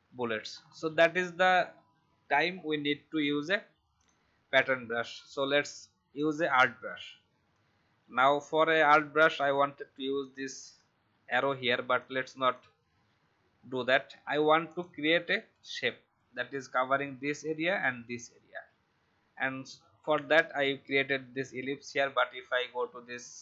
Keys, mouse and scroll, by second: 0.5 alt+scroll down 1, 3.3-3.9 alt+scroll down 1, 3.9-12.4 drag, 19.9-20.3 alt+scroll up 1, 22.5-23.4 drag.